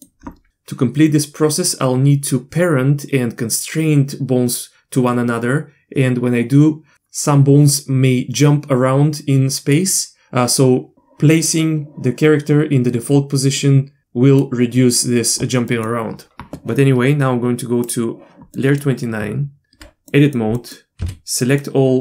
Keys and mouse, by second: 13.6-14.4 middle drag, 15.7 middle click, 17.8 click, 18.5 middle click, 19.5 Tab, 20.1 middle click, 20.6 middle click, 21.0 a, 21.4 middle click.